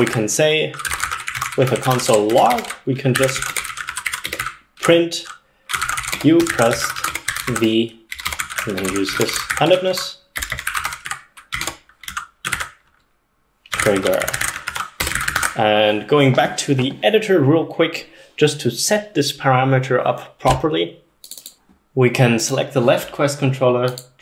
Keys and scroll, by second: 0.0-4.5 typing, 5.6-15.7 typing.